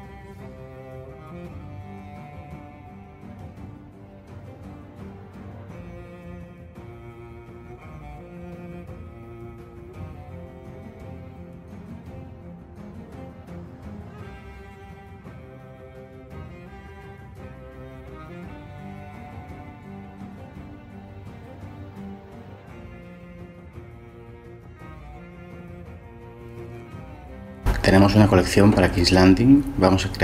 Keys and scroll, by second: 0.0-0.6 typing, 1.0 Tab, 1.7 shift+d, 1.8 Escape, 2.7 ctrl+j, 3.4 Delete, 3.7 shift+a, 5.7 Tab, 6.0-13.0 typing, 12.5 Tab, 13.7 ctrl+j, 15.0 Delete, 15.1 shift+a, 15.2 Tab, 17.1 Tab, 17.2-22.5 typing, 22.6 Tab, 23.6 ctrl+z, 23.7 ctrl+z, 23.9 shift+d, 24.0 Escape, 24.4 ctrl+z, 25.1 ctrl+j.